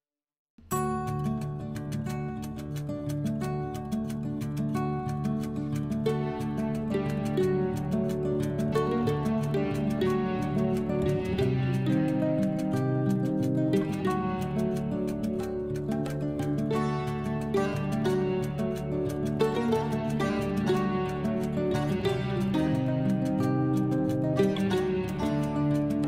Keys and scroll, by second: 6.3 ctrl+z, 7.3 ctrl+z, 10.0 ctrl+z.